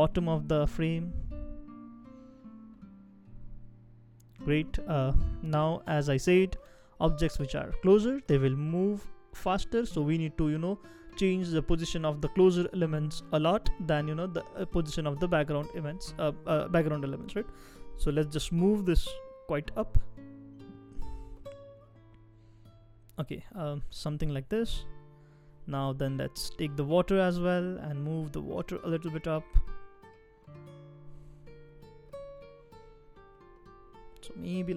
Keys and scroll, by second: 0.3 shift+Down, 0.8 shift+Down, 17.3 shift+Up, 17.8 shift+Up, 17.9 shift+Up, 23.0 shift+Down, 23.3 shift+Down, 23.4 shift+Down, 27.2 shift+Up, 27.7 shift+Up, 27.8 shift+Up, 34.3 shift+Down.